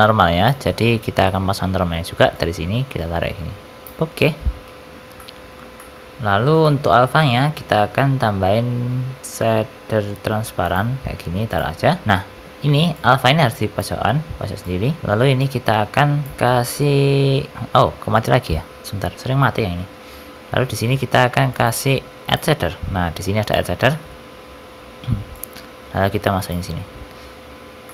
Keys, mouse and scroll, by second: 19.1 n, 20.1 shift+a, 23.8 middle click, 24.4-25.3 scroll up 4, 25.3 click, 27.8 middle click.